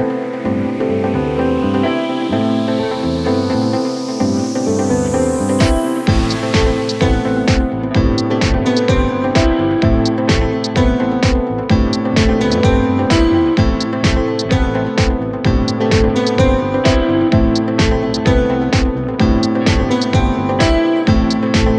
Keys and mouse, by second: 2.0 r, 4.2 g, 8.4 ctrl+z, 9.0 b, 10.2 ctrl+z, 11.1 shift+b, 14.1 shift+click, 16.5 r, 18.3 z, 19.4 r, 21.5 g.